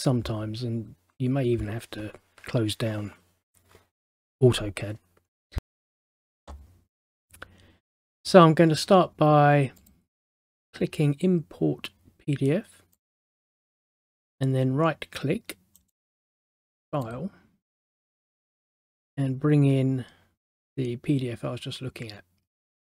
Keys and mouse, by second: 5.6 click, 9.9 click, 13.1 click, 15.9 right click, 17.2 click.